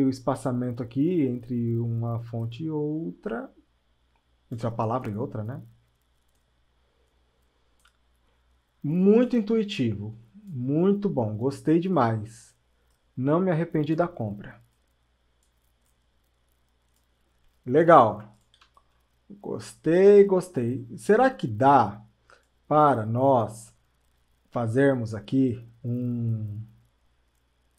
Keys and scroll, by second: 20.4 ctrl+alt+space.